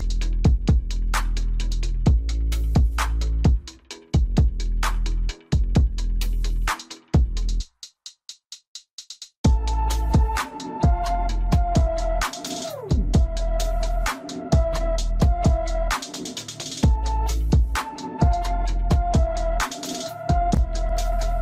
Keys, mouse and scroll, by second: 1.2 click, 1.8 click, 4.0-9.5 drag, 9.9-10.8 scroll down 2, 12.8-13.9 middle drag, 13.9-14.6 scroll up 2, 14.6-17.0 shift+middle drag, 17.0-17.8 scroll up 1, 17.8-18.5 scroll down 1, 18.5-19.1 scroll up 1, 19.1-21.4 middle drag.